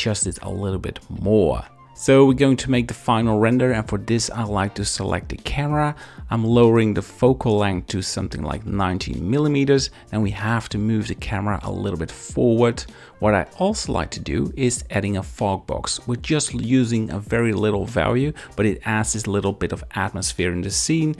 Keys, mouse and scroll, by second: 0.6-1.8 drag, 2.5 click, 6.1-7.2 drag, 10.1 shift+`, 10.3 w, 11.4 click, 12.3-13.8 drag, 14.8-16.5 drag, 19.5 click, 20.7 click.